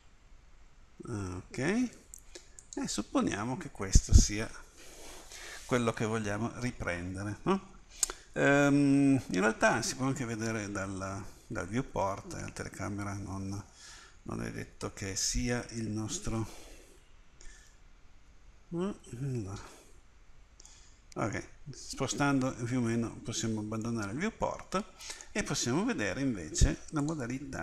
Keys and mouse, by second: 1.4-2.5 middle drag, 10.3 Escape, 11.1 Escape, 14.6 Escape, 17.7 ctrl+alt+KP_0, 19.0 Escape.